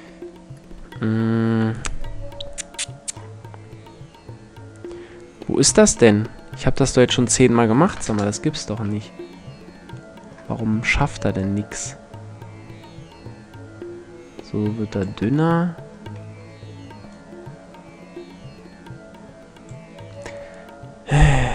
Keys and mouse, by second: 2.7-6.6 middle drag, 6.6-8.1 drag, 8.5-10.4 middle drag, 10.5-11.0 middle drag, 11.0-12.9 drag, 12.9-14.9 middle drag, 16.7-18.6 drag.